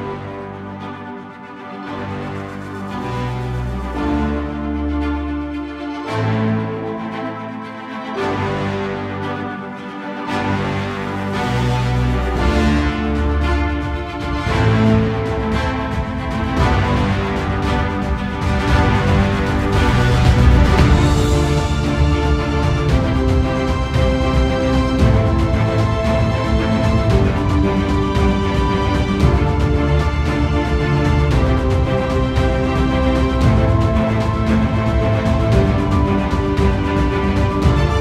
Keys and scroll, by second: 2.1 ctrl+z, 17.0 alt+space, 26.1 alt+space, 31.2 alt+space, 35.6 space.